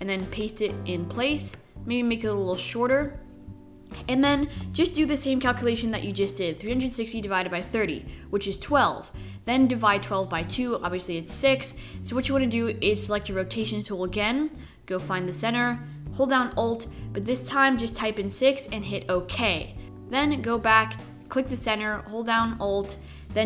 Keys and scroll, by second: 1.7 shift+super+v, 4.8 super+3, 4.9-7.1 typing, 12.8 r, 18.0 alt+6, 20.1 r, 21.6 alt+r.